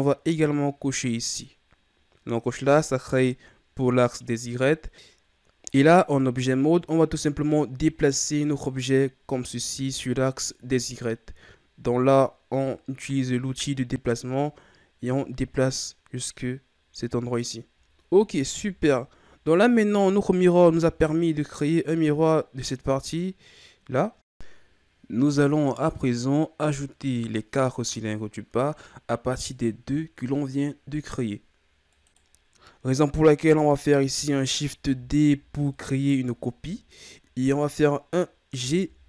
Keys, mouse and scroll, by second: 0.3 click, 2.4-4.4 scroll up 3, 5.7 right click, 8.2 right click, 10.1-12.7 scroll down 2, 12.7-15.8 drag, 17.9 scroll up 3, 18.9-19.6 ctrl+scroll up 1, 25.2 click, 30.8-31.3 scroll down 2, 31.3-31.9 middle drag, 31.6 scroll, 32.3 right click, 34.8 shift+d, 38.5 g.